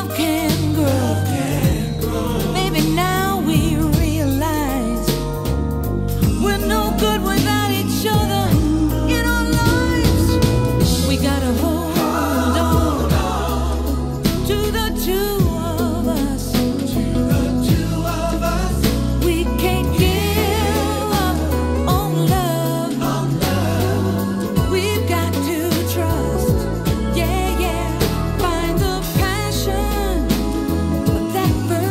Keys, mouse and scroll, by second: 0.7 click, 1.5 typing, 7.5 click, 8.0-8.9 typing, 10.7-14.8 drag, 14.8 1, 15.9-21.1 drag, 22.6-29.2 drag, 29.2-31.0 scroll up 10, 31.0 click, 31.5-31.9 scroll up 3.